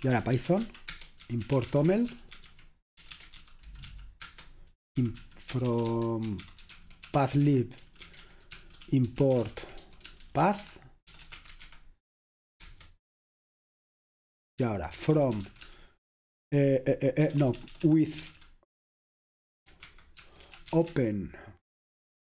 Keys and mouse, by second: 0.0-12.7 typing, 14.4-15.8 typing, 17.2-21.4 typing.